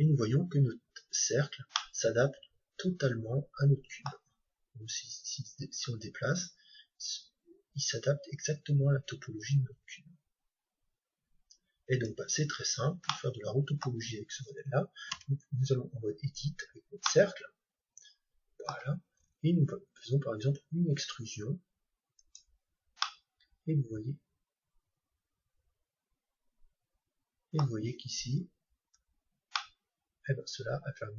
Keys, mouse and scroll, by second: 0.3-3.5 middle drag, 5.2-7.2 drag, 12.6-13.2 scroll down 1, 13.2-15.0 middle drag, 15.1 Tab, 16.4-18.9 middle drag, 22.3-24.1 drag, 22.9-24.9 middle drag, 28.8 Tab, 29.6-31.1 middle drag.